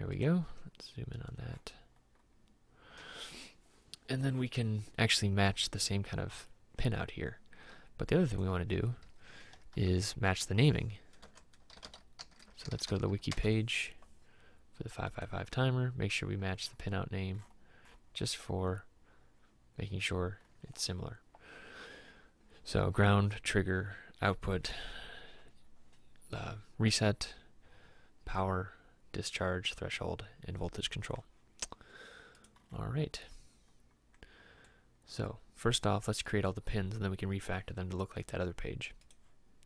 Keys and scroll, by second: 9.8-13.1 typing, 13.4 Return.